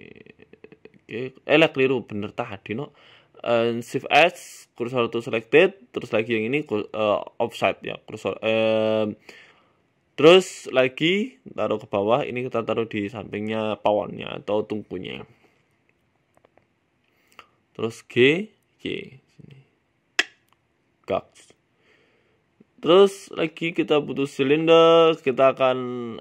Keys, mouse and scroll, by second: 0.2 shift+s, 1.9 ctrl+z, 2.7 ctrl+shift+z, 3.0 right click, 3.8 right click, 4.8 shift+s, 6.3 right click, 6.5 shift+s, 7.7 KP_1, 8.0-8.5 scroll up 8, 8.5 g, 10.3 click, 10.9-11.5 scroll down 8, 11.2 shift+middle click, 11.7 shift+middle click, 12.1 g, 13.2 s, 13.9 scroll up 5, 14.1 shift+middle click, 14.7 f, 15.2 g, 17.1 middle click, 18.4 g, 19.6 shift+middle click, 21.3 KP_1, 21.8 shift+middle click, 22.8 shift+a, 24.8 scroll down 2, 25.0 shift+middle click, 25.6 scroll down 1, 26.0 Tab.